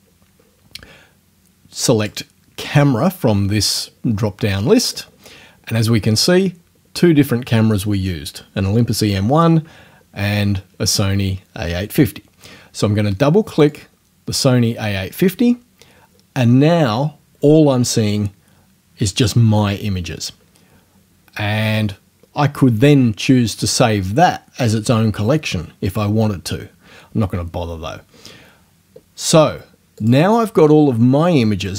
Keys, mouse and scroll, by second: 2.0 click, 4.9 click, 13.5 click, 30.0 click.